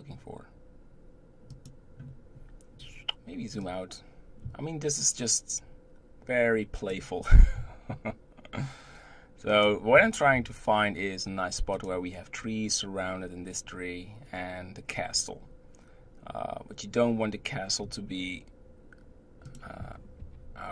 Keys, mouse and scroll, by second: 3.6-6.6 drag, 7.6 g, 15.5-17.8 scroll up 1, 17.8 g.